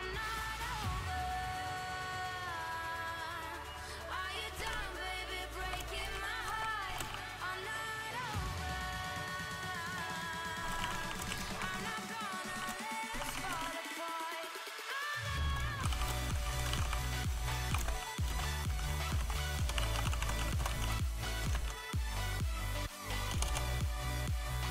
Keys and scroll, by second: 0.8 l, 1.1 v, 2.1-23.3 typing, 5.4 Return, 12.2 Return, 24.5 a.